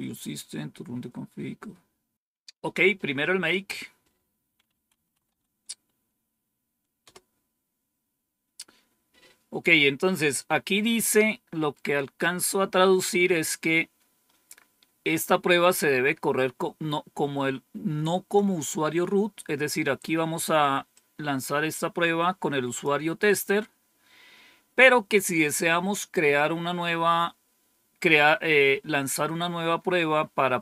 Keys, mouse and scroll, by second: 3.4 click, 4.4-5.7 typing, 6.9 typing, 11.9-12.6 scroll down 1, 20.8-22.7 drag.